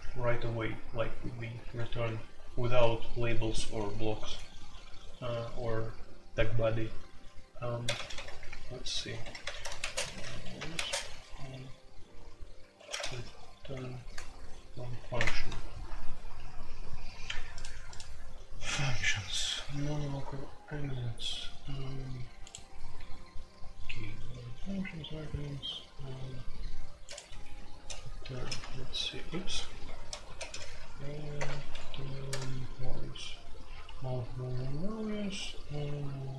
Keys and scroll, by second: 1.9 typing, 7.8 typing, 9.2-10.7 typing, 12.7-13.1 typing, 14.4 Down, 14.5 Down, 14.7 Down, 15.1 Return, 17.1 typing, 27.7-28.3 typing, 29.9 ctrl+g, 30.1-32.2 typing.